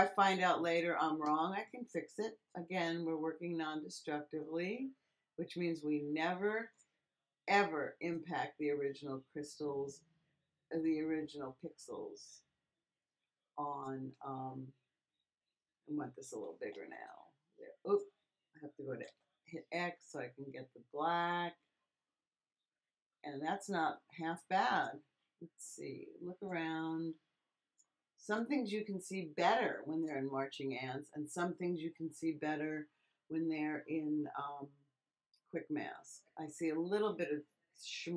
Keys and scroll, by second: 14.3 [, 16.3 ], 19.0 x.